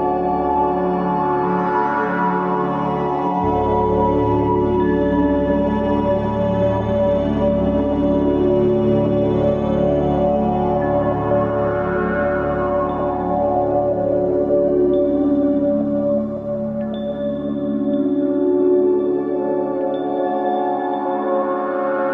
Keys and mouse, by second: 4.7-5.6 drag, 7.0 ctrl+z, 7.3 ctrl+z, 9.0 click, 13.3-16.1 middle drag, 16.2 ctrl+s, 19.7 Tab.